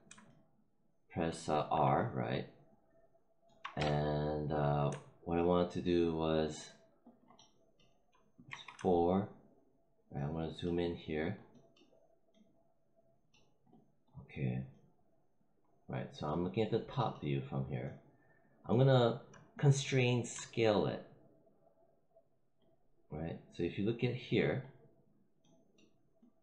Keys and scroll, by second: 3.7 space, 8.4 4.